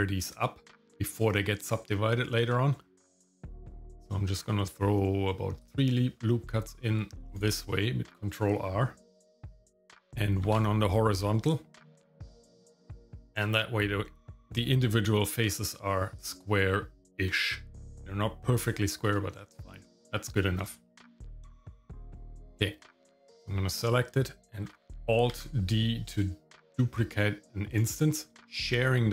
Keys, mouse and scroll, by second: 10.5 ctrl+r, 12.4-13.4 shift+middle drag, 15.6 click, 19.5 shift+middle click, 20.4 shift+middle click, 20.7 middle click, 21.3 Tab, 22.1 shift+middle click, 23.3 click, 23.8 middle click, 25.3 alt+d, 28.4-29.1 middle drag.